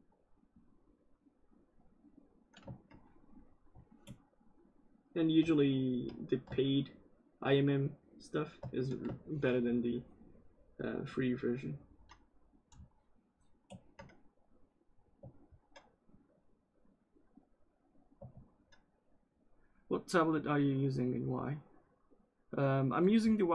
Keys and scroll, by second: 18.2 ctrl+z.